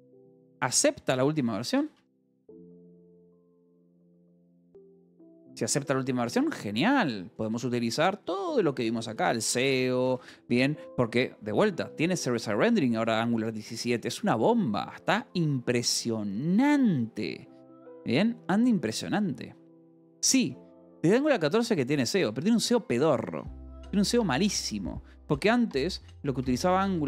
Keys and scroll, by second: 0.0-5.9 typing, 7.3 k, 8.2 j, 9.6 shift+v, 10.0 j, 10.5 Escape, 11.8 o, 12.8 =, 13.2 space, 26.4-27.0 typing.